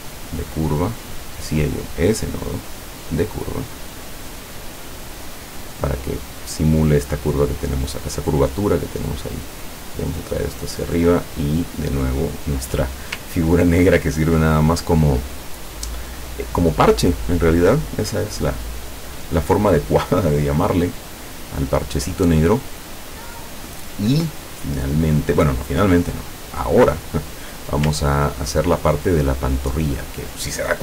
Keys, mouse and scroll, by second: 0.1 click, 1.2 click, 1.6 click, 2.9 click, 4.2-5.8 drag, 8.7-10.5 drag, 10.6 click, 12.0 click, 13.4-13.7 ctrl+scroll down 1, 21.4 click, 25.8 click, 26.3-27.5 drag, 28.2-28.5 ctrl+scroll down 2.